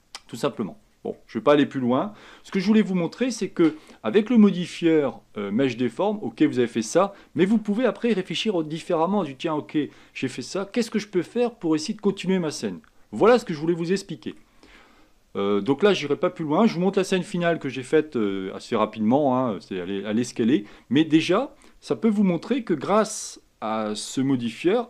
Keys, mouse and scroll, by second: 0.1 middle click, 0.9 scroll down 1, 1.2-4.1 middle drag, 4.1 scroll down 3, 6.8-12.9 middle drag, 12.9-13.4 scroll down 2, 13.4-24.8 middle drag.